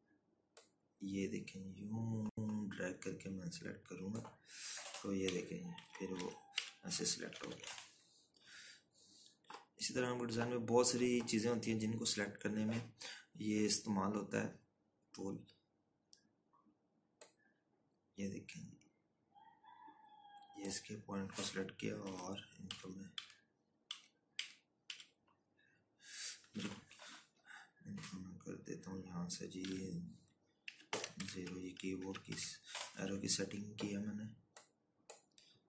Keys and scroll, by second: 7.4 Right, 7.9 Left, 8.2 Right, 8.6 Left, 9.3 ctrl+-, 9.5 ctrl+-, 24.8 Left, 25.3 Down, 26.0 Right, 26.5 Down, 28.6 Up, 28.6 ctrl+k, 31.7 2, 32.8-34.3 typing, 34.4 Return.